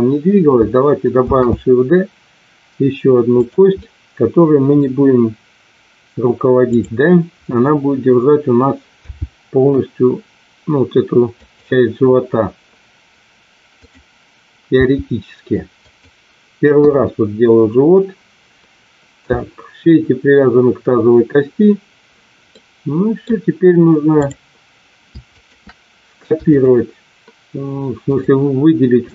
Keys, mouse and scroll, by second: 1.2 shift+d, 3.9 middle click, 9.0 g, 13.6 click, 14.9 g, 16.8 KP_1, 22.5 middle click, 25.2 shift+click, 26.5 shift+click, 28.0 shift+click.